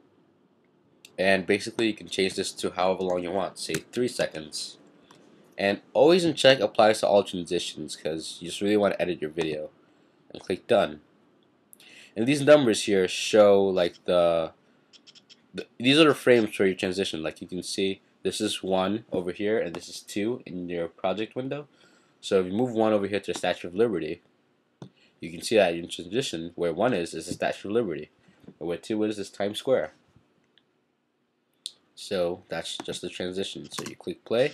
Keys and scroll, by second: 3.5-5.5 typing.